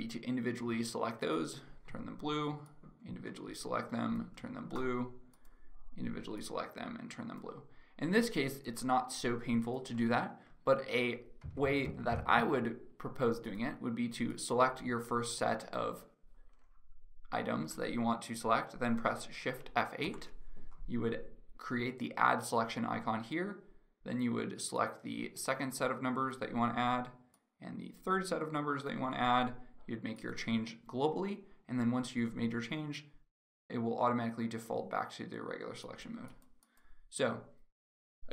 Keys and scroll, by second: 11.0 ctrl+z, 19.8 shift+F8.